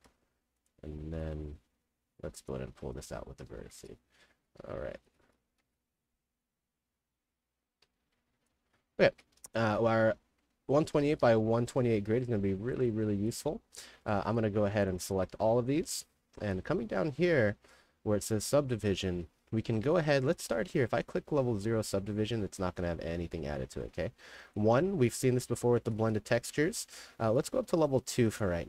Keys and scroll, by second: 0.0 1, 3.2-5.6 typing, 7.9 [, 9.2-11.8 typing, 22.1-24.0 typing, 25.7 s, 26.5 w.